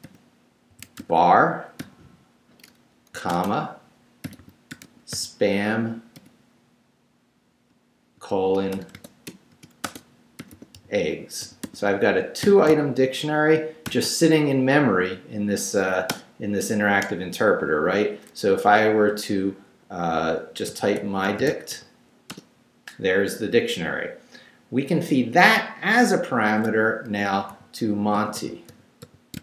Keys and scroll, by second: 0.0-1.8 typing, 4.2-6.2 typing, 8.2-12.4 typing, 13.9 shift+], 16.1 Return, 20.5-22.0 typing, 22.3 Return, 27.5-29.4 typing.